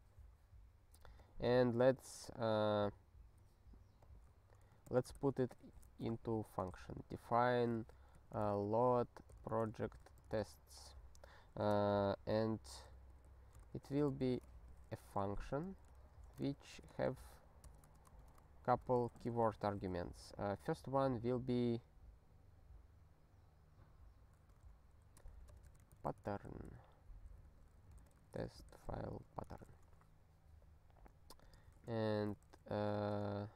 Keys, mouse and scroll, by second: 1.2 click, 1.9 ctrl+b, 2.0 ctrl+b, 4.0 click, 4.9 ctrl+g, 5.1 Return, 5.3-11.6 typing, 12.9 alt+b, 13.1 alt+b, 13.6 ctrl+b, 14.2 ctrl+b, 14.5 *, 15.2 alt+f, 15.3 alt+f, 16.0 ctrl+f, 16.6-20.1 typing, 17.8 Return, 24.5-29.7 typing, 27.4 alt+b, 31.4 click, 31.7 ctrl+alt+k, 32.0-33.1 typing.